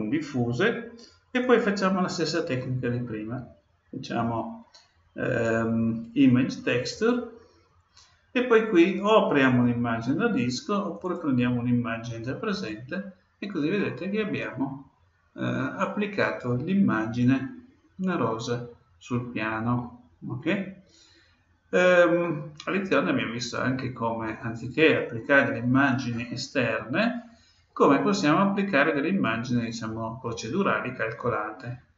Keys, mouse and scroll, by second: 1.4-3.2 drag, 10.9-12.7 drag, 13.7-15.6 middle drag, 22.2-24.0 middle drag.